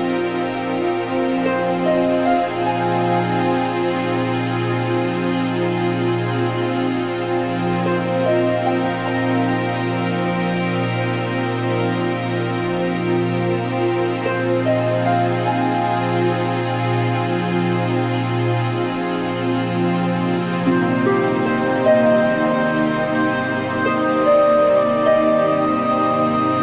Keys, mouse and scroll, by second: 0.1 middle click, 0.2 scroll, 0.6 middle click, 1.1 scroll, 1.6 scroll, 4.0 click, 5.0 click, 5.1 click, 6.6 click, 7.5 click, 8.2 alt+middle click, 8.2 alt+middle click, 9.3 click, 9.4 ctrl+z, 9.7 click, 10.3 middle click, 11.8 click, 12.3 middle click, 13.2 alt+middle click, 14.9 click, 15.3 middle click, 15.6 middle click, 15.6 middle click, 15.7 middle click, 17.0-17.9 scroll, 18.3 alt+middle click, 18.3 click, 19.6 q, 21.2 click, 22.2 middle click, 22.3 middle click, 22.4 scroll, 22.9 g, 23.7 click, 24.7 click, 24.8 click, 26.5 alt+scroll.